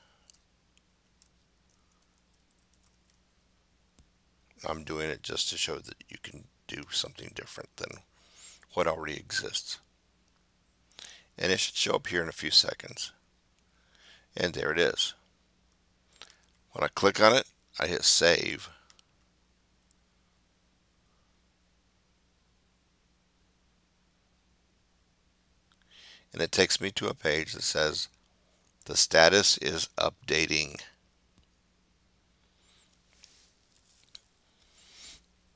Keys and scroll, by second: 0.1-3.6 typing.